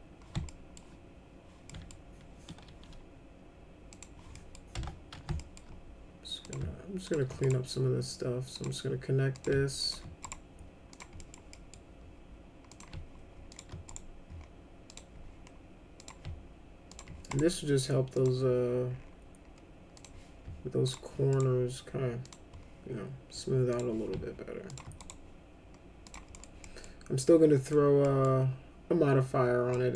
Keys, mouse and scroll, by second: 0.5 alt+middle click, 1.7 middle click, 3.9 click, 4.3 middle click, 4.8 F3, 5.4 alt+middle click, 6.4 click, 7.1 ctrl+click, 7.4 right click, 8.6 click, 9.4 click, 9.8 ctrl+click, 10.3 right click, 10.9 click, 11.2 middle click, 11.5 middle click, 12.7 click, 13.5 ctrl+click, 13.9 right click, 14.9 click, 16.0 click, 16.9 ctrl+click, 17.3 right click, 18.2 click, 19.9 click, 20.9 ctrl+click, 21.3 right click, 22.2 click, 23.7 click, 24.7 ctrl+click, 25.0 right click, 26.0 click, 26.3 middle click, 26.7 middle click, 27.6 middle click, 28.1 middle click, 29.7 middle click.